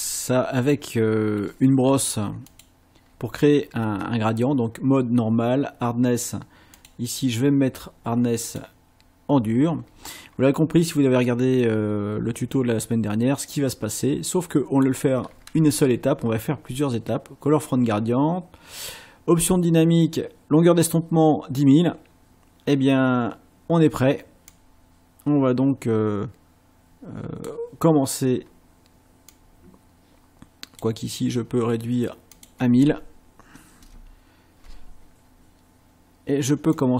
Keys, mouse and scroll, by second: 2.5 click, 6.8 click, 8.5 click, 12.6-15.0 drag, 24.5-27.6 drag, 29.3-31.0 drag, 32.3 click, 33.8 BackSpace, 36.7-36.9 drag.